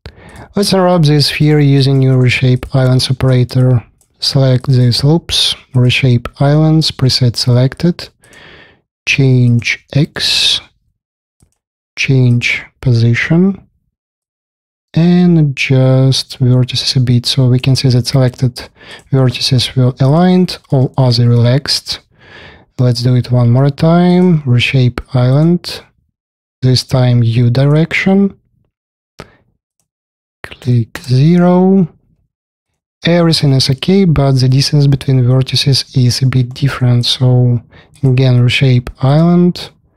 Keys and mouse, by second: 0.8-2.5 alt+drag, 2.5 shift+middle click, 2.9 space, 3.2 KP_4, 3.5-5.0 alt+drag, 18.0-18.8 drag, 18.9 middle click, 18.9-19.4 drag, 19.4 middle click, 20.0 click, 20.3 alt+middle click, 20.9-24.0 drag, 32.7 drag, 35.5-36.1 drag, 36.3 alt+middle click, 36.9 click.